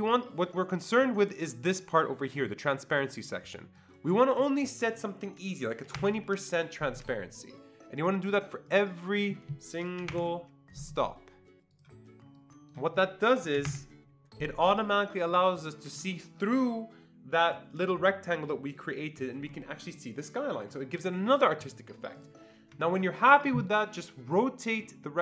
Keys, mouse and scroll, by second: 3.8 click, 5.6-6.4 typing, 8.0 click, 8.7 click, 9.2 click, 9.8-10.6 typing, 11.7 click, 12.4-17.9 drag, 13.6 typing, 21.9-22.7 typing, 22.2 click, 22.8-23.5 ctrl+scroll down 1, 24.7-25.2 drag.